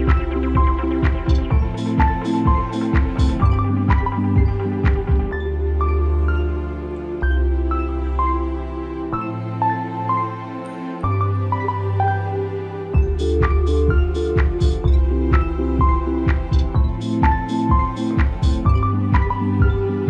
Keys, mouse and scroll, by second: 0.0-4.1 typing, 5.6 click, 7.4 click, 13.2 click, 15.8 click.